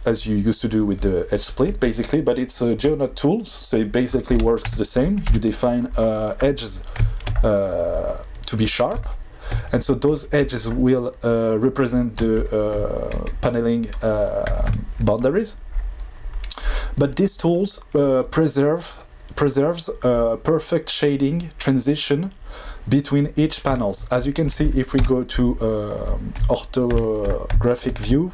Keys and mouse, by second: 2.2 click, 4.6 Tab, 5.2 2, 7.1 shift+middle click, 8.4 middle click, 9.0 shift+click, 10.0 click, 10.4 click, 11.9 click, 14.5 Tab, 24.9 KP_5.